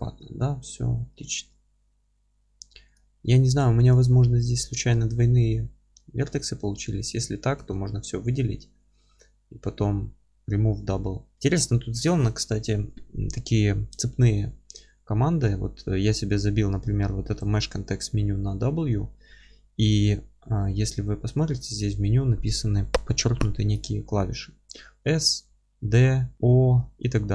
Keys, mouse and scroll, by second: 2.9 click, 3.2-3.5 scroll up 2, 3.5 1, 3.9 click, 4.3-4.8 scroll up 2, 4.8-5.7 scroll down 2, 5.7-6.1 scroll up 1, 6.1 scroll down 1, 6.3 Tab, 7.6 a, 8.2-27.3 middle drag.